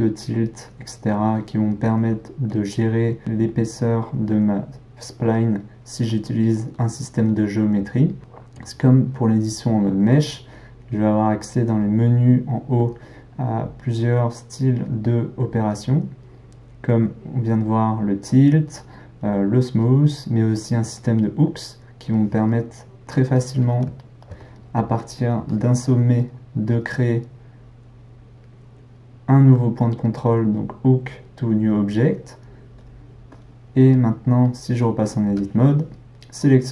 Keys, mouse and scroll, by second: 11.7-14.7 drag, 23.3-25.4 middle drag, 25.4 drag, 26.7-29.8 drag, 35.3 Tab.